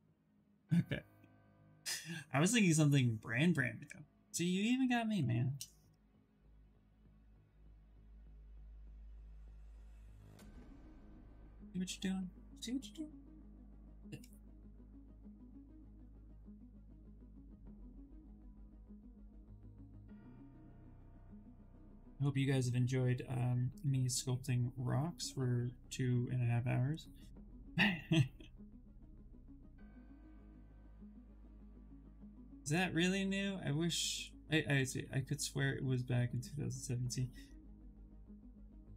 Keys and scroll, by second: 9.2 s, 14.4 s.